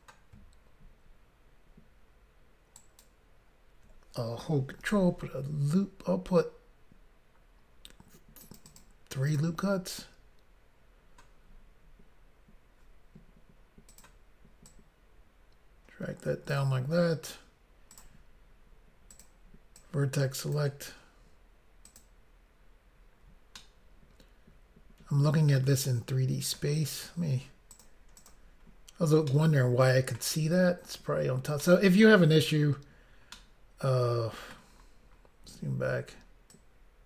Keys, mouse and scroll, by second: 2.8 ctrl+right click, 4.8 ctrl+r, 6.2 scroll up 1, 7.7 scroll up 1, 8.4 click, 8.6 click, 8.7 click, 8.8 double click, 9.3 double click, 9.4 double click, 13.9 click, 14.0 click, 14.7 click, 17.9 click, 18.0 click, 19.1 click, 19.2 click, 19.8 click, 21.9 click, 22.0 click, 23.6 middle click, 27.7 click, 28.3 double click, 28.7 scroll down 1, 29.3 middle click, 29.3 scroll down 1, 31.6 middle click, 32.5 scroll down 1, 33.4 middle click, 34.8-35.7 scroll down 3, 36.5 click.